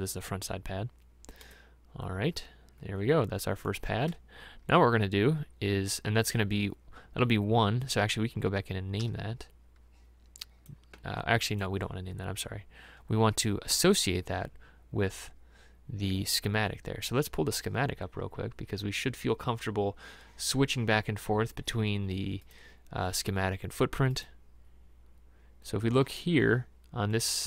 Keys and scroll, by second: 9.1 e.